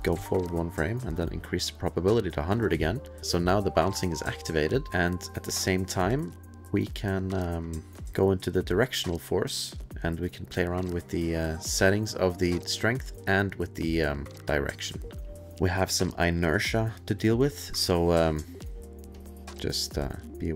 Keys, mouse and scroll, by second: 0.2 Right, 1.4 click, 4.7 click, 5.6 click, 6.8 click, 8.8 click, 9.9 click, 15.2 click, 16.8 click, 20.1 click.